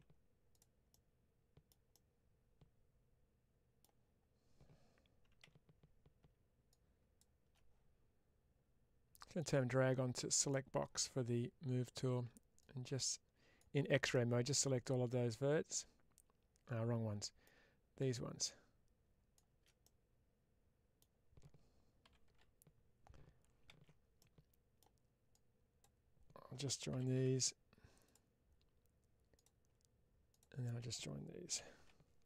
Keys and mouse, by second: 0.4 click, 0.8 middle click, 1.8-3.7 middle drag, 5.3 alt+z, 9.0-10.4 drag, 14.0-17.3 middle drag, 19.7-20.8 middle drag, 23.7 ctrl+z, 24.1 middle click, 25.3 click, 32.1 middle click.